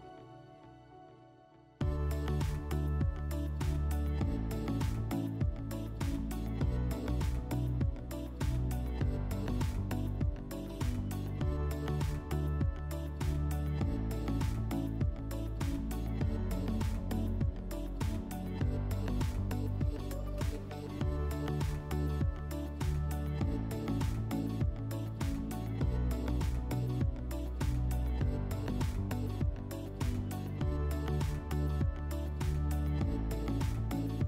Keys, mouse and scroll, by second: 0.3 click, 5.4 click, 7.3 m, 9.8-10.8 drag, 13.2 alt+click, 17.3 m, 19.3 click, 25.2 click, 28.1 click, 33.8 click.